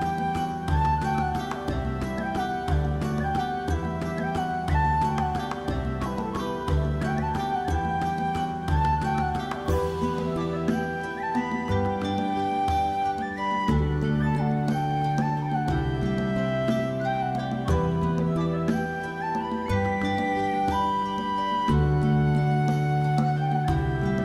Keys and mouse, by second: 0.3 click, 0.7 g, 1.1 click, 1.5 g, 1.9 click, 2.2 shift+middle click, 2.5 alt+z, 2.6 middle click, 2.8 Tab, 2.9 middle click, 3.1 shift+middle click, 3.3 middle click, 3.6 Tab, 3.9 shift+middle click, 4.3 middle click, 4.7 middle click, 5.6 ctrl+f, 6.6 Tab, 6.7 middle click, 7.4 /, 7.8 alt+middle click, 8.1 alt+middle click, 8.3 shift+middle click, 8.6 shift+middle click, 9.8 Tab, 10.0 shift+middle click, 16.0 alt+z, 16.4 middle click, 16.9 shift+middle click, 17.0 middle click, 17.4 s, 17.8 alt+middle click, 18.1 alt+middle click, 18.4 g, 18.8 click, 19.2 shift+middle click, 19.4 alt+z, 19.7 alt+z, 20.0 click, 20.3 shift+middle click, 20.6 g, 21.5 click, 21.9 shift+middle click, 22.7 right click, 23.1 shift+click, 23.4 middle click, 23.7 alt+click, 23.9 alt+click.